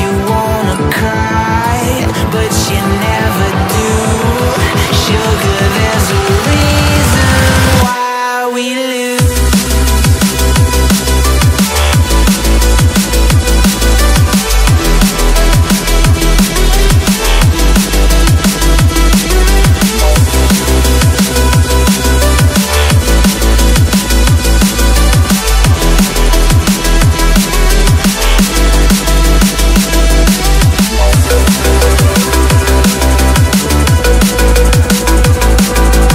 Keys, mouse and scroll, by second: 0.2 ctrl+i, 4.0 5, 4.1 Return, 4.7 ctrl+click, 4.8 ctrl+scroll down 1, 5.0 ctrl+click, 5.8 scroll up 1, 6.2 shift+click, 6.3 shift+right click, 7.4 double click, 7.7 ctrl+t, 9.2 alt+scroll down 1, 9.4 alt+scroll up 1, 9.9 ctrl+t, 11.1-11.8 scroll up 3, 12.4 alt+scroll down 1, 12.8 ctrl+z, 17.4 Right, 17.8-20.0 typing, 23.1 alt+scroll down 1, 23.2 alt+scroll up 1, 23.4 alt+scroll down 1, 24.6-25.0 scroll down 1, 25.6-26.1 scroll up 1, 29.2 ctrl+t, 30.5 ctrl+j, 30.7 ctrl+t, 32.4 right click, 33.8 ctrl+g, 33.9 right click.